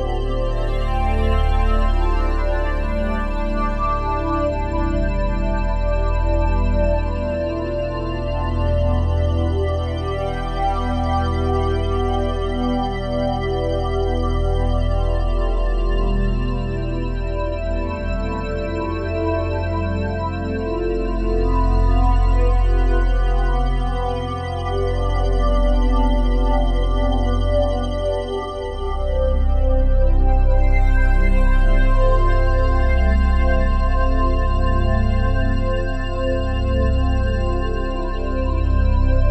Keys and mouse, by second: 1.4-2.3 typing, 5.1 Escape, 5.7-8.3 alt+drag, 8.3 1, 9.2 click, 9.7 click, 10.3 click, 11.6 click, 12.3 click, 14.5 click, 15.5 click, 15.9 click, 17.7 s, 17.8 h, 17.9 o, 19.8 click, 20.1 click, 24.7 click, 26.4 5, 26.6 Return, 28.8 click, 29.6-33.0 drag, 33.3 alt+click, 34.9-37.4 drag, 37.7 alt+click, 39.0 alt+click.